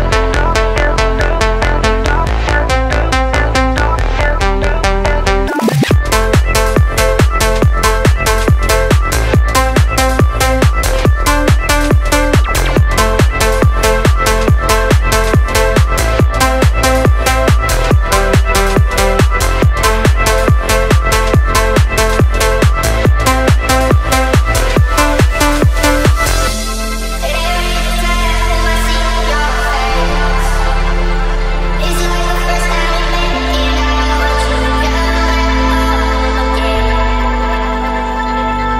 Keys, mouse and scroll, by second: 0.3 click, 0.7-1.4 middle drag, 2.3 click, 2.8 click, 4.0 click, 4.3-4.6 scroll down 1, 4.6-5.3 middle drag, 5.5-6.1 scroll down 2, 6.1 scroll down 1, 6.5 shift+middle drag, 6.9-7.3 scroll down 1, 7.3 click, 7.3 scroll up 1, 7.8-8.7 middle drag, 8.8 scroll up 1, 9.2-9.8 shift+middle drag, 10.9 click, 12.5 click, 24.5-26.4 drag, 27.1 click, 28.3 click, 29.0 drag, 29.9 click, 30.4 space, 31.0 click, 32.4-33.8 middle drag, 35.3 space, 36.4 click, 36.7-37.1 scroll down 1, 37.1-38.7 middle drag.